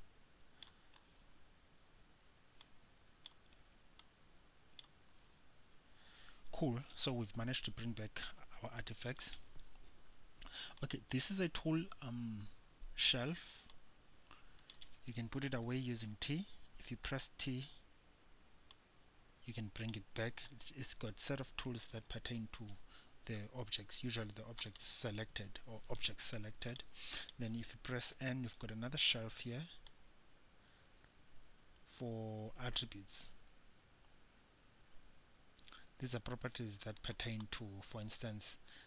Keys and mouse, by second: 1.7-4.3 middle drag, 4.3-6.1 drag, 11.0-13.9 drag, 13.9-15.9 middle drag, 17.3 t, 17.8-19.0 middle drag, 19.0-20.7 drag, 24.9-26.9 drag, 28.3 n, 29.6 middle click, 30.2-31.8 drag, 32.1-38.8 middle drag.